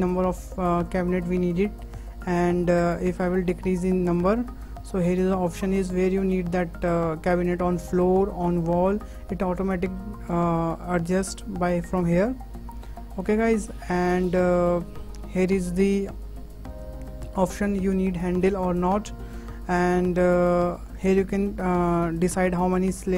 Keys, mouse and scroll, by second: 7.8-9.1 drag, 9.1-9.4 scroll down 3, 9.4-10.7 middle drag, 10.7-11.0 scroll up 2, 11.1 shift+middle click, 12.0-15.0 drag, 15.6-15.9 scroll up 2, 15.9-16.3 middle drag, 16.3 scroll up 1, 16.5-18.3 shift+middle drag, 18.3 click, 18.8 click, 22.9-23.1 drag.